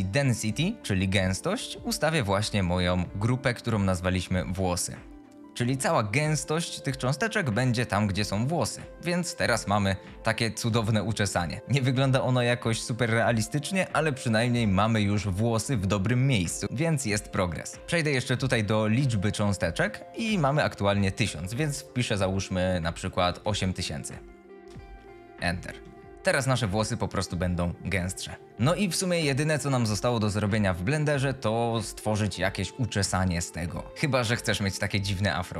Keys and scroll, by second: 23.4 KP_8, 23.6 KP_0, 24.5 Return.